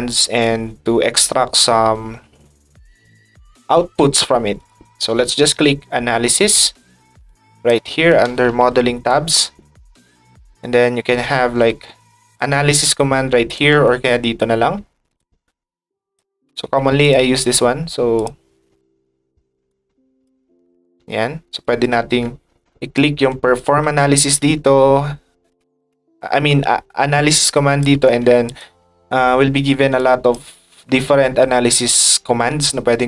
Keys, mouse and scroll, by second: 4.5 click, 9.1 click, 12.4 ctrl+click, 15.1-16.2 ctrl+drag, 17.0 click, 18.1 click, 19.7 click, 21.6 click, 22.9 ctrl+click, 27.3 ctrl+click, 28.4 click, 29.9 click.